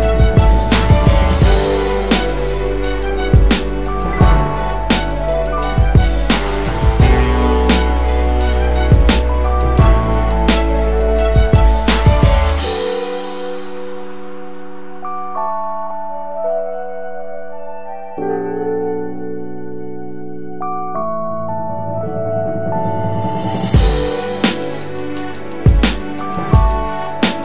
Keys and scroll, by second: 11.5 BackSpace.